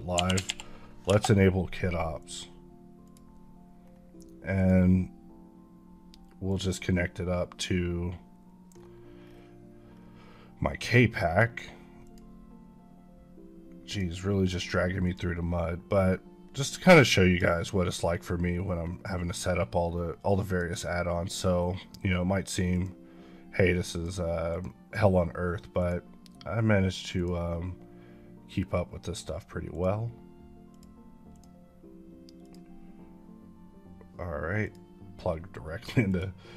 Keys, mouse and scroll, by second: 0.0-0.3 typing, 2.1 click, 3.7 scroll down 1, 4.4 click, 8.7-9.1 scroll down 1, 11.9 click, 17.1 click, 17.8-18.4 scroll up 1, 18.4-19.2 scroll up 1, 19.2-20.3 scroll up 1, 20.3-21.4 scroll up 1, 21.4-22.6 scroll down 1, 22.6-34.8 drag.